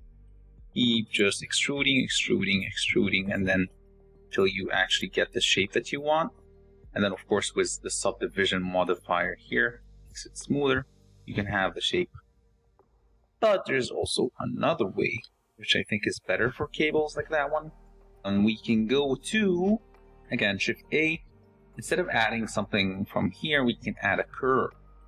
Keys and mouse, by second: 0.0-5.5 typing, 7.0 Tab, 7.6 z, 9.1-10.4 drag, 14.9 x, 22.0 shift+a.